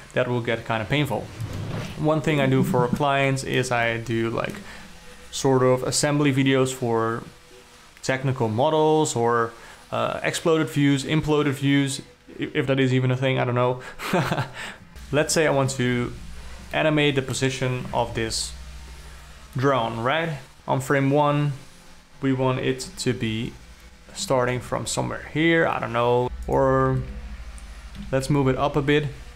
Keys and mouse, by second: 3.0 g, 3.2-3.6 alt+middle drag, 3.8-4.1 alt+middle drag, 4.4-5.0 ctrl+middle drag, 14.9 n, 16.3 shift+Left, 17.3 alt+middle click, 18.3 n, 23.4 g, 26.2 KP_0, 26.4 g, 27.5 ctrl+z, 28.5 g.